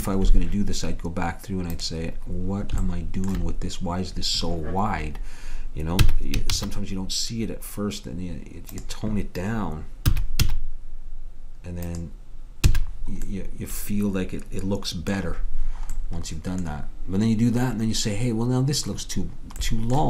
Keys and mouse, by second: 0.0 Escape, 1.9-4.1 drag, 6.1 s, 10.2 s, 12.8 a.